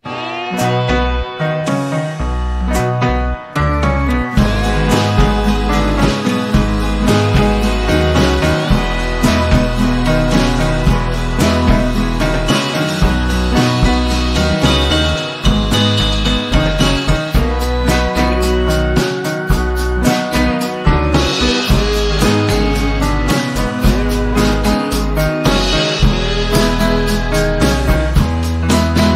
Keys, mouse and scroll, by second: 5.6 click, 6.3-6.6 ctrl+scroll down 1, 6.8 z, 7.6-8.2 alt+drag, 9.3 p, 10.4 click, 13.2 v, 13.9-18.0 shift+drag, 18.6 z, 19.3 alt+scroll down 1, 19.9 ctrl+scroll down 1, 21.8-22.7 drag, 23.6-24.3 typing, 24.9-25.9 alt+drag.